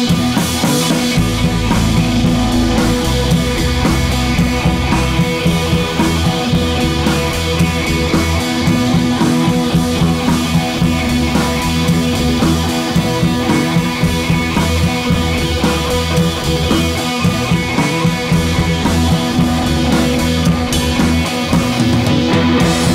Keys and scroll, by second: 1.4 Left, 1.4 Left, 1.7 Left, 3.6 super+d, 4.2 super+z, 4.6 super+d, 5.5 super+d, 9.9 Right, 10.0 Right, 10.1 Right, 11.3 Tab.